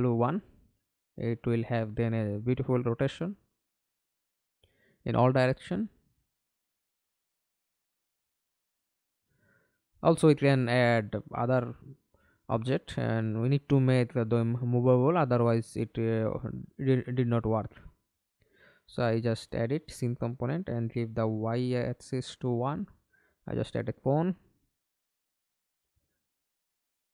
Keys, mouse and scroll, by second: 0.8 1, 1.1 Return, 3.1 Return, 4.0 middle click, 5.0 alt+p, 9.5 Escape, 10.3-10.9 scroll down 2, 15.6 ctrl+space, 16.2 ctrl+middle click, 16.7 ctrl+space, 21.7 1, 22.0 Return.